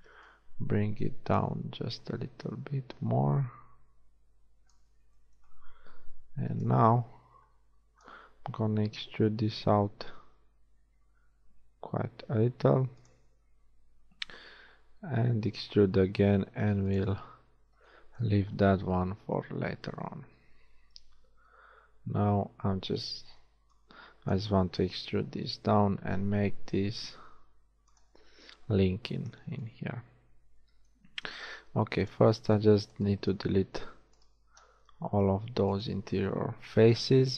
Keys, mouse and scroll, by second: 0.2 b, 2.3-4.1 drag, 6.5 a, 6.7 b, 9.3 e, 14.9 e, 17.5 a, 21.6 a, 22.0 b, 23.2 b, 25.5 e, 29.9 a, 31.1 ctrl+Tab, 34.8 z.